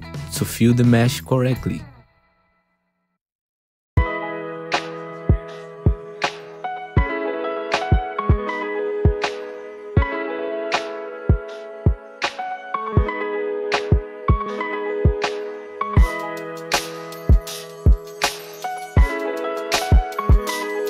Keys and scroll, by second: 0.3 w, 1.7 ctrl+shift+e, 2.9 ctrl+shift+e, 4.5 ctrl+shift+e, 5.8 ctrl+shift+e, 7.6 ctrl+shift+e, 10.0 ctrl+z, 11.0 ctrl+shift+e, 12.8 ctrl+shift+e, 14.3 ctrl+shift+e, 16.2 ctrl+shift+e, 19.4 ctrl+shift+e, 19.9 ctrl+z, 20.6 ctrl+shift+e.